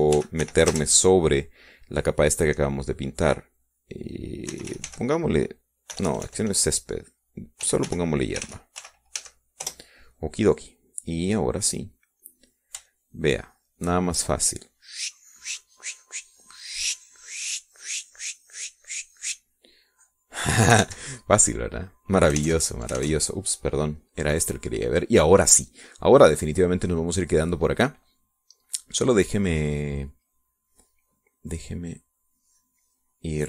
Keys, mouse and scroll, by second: 0.2-2.4 typing, 5.7-7.4 typing, 8.9-11.2 typing, 11.8 middle click, 13.6 click, 14.4-15.5 shift+drag, 16.0-21.0 drag, 21.5 click, 21.9 middle click, 22.3 ctrl+s, 22.7-23.9 ctrl+middle drag, 23.9 alt+Tab, 25.5 click, 26.1 click, 27.1-28.3 drag.